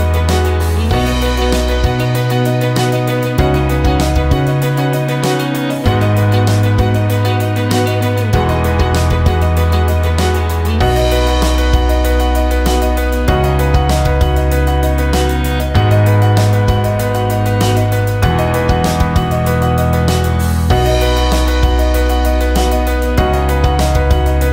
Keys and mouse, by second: 4.3 g, 8.2 shift+click, 9.5 j, 11.2 click, 12.3 g, 16.8 shift+click, 18.4 j, 21.8-24.4 right drag, 24.4 click.